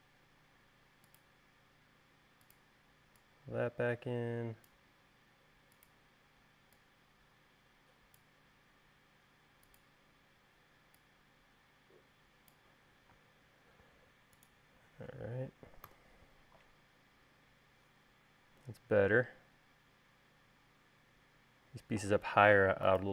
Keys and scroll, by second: 13.4 space, 16.1 u.